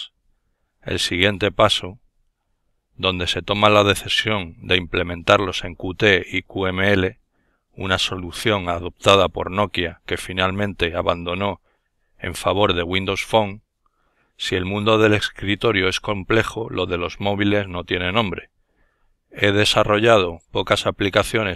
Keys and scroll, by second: 4.5-7.2 typing, 8.0 Return.